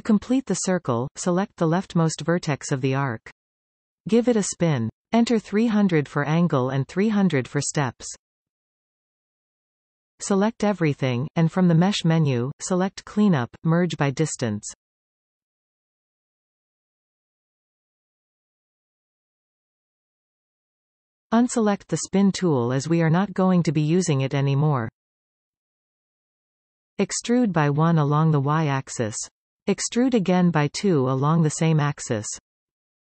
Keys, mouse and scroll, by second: 0.0 scroll up 2, 1.4 click, 3.5 click, 6.2-7.4 drag, 7.4 0, 8.6 shift+Tab, 9.5 0, 11.0 a, 13.4-16.5 drag, 17.7-18.1 scroll down 2, 18.1 middle click, 18.7 scroll up 2, 18.9-19.9 scroll down 6, 19.9-22.7 shift+middle drag, 22.7 click, 27.0 e, 30.2 e.